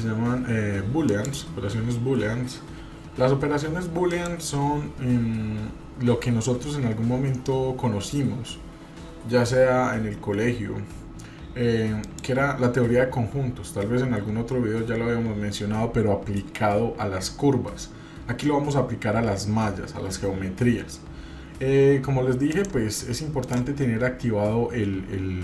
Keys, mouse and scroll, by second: 4.1 click, 12.0 click, 22.5-23.9 drag.